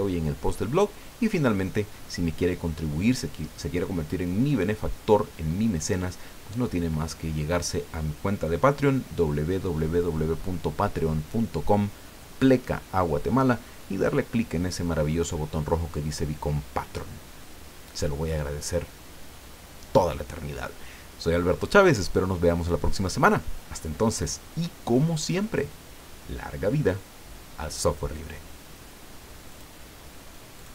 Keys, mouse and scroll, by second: 25.9 scroll down 2, 29.5 click, 30.6 click.